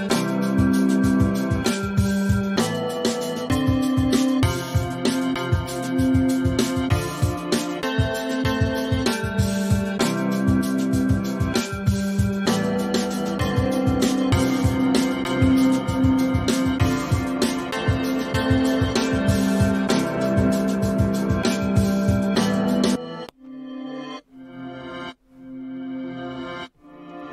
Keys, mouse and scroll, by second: 3.5 super+v, 6.1 super+v, 7.4 super+v, 10.1 super+d, 12.6 super+d, 13.3 super+d.